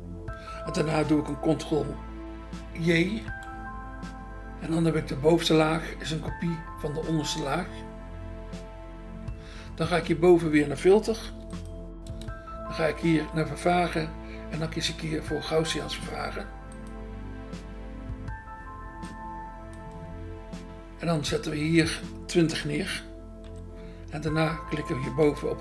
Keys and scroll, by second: 3.2 ctrl+j, 11.3 BackSpace, 12.1 BackSpace, 15.3 BackSpace, 23.4 0, 25.2 BackSpace.